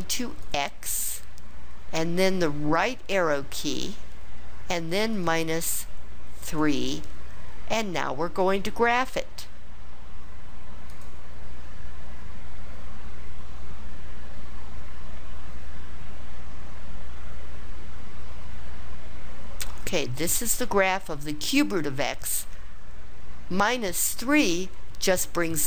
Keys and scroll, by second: 0.4 x, 2.8 ), 5.1 -, 6.5 3.